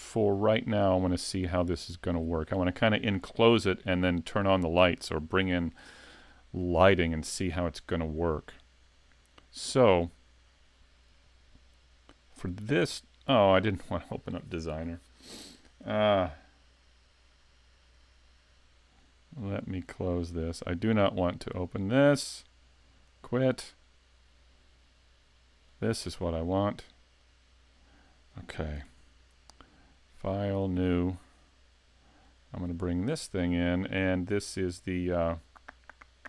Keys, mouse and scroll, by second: 10.1 click, 13.6 click.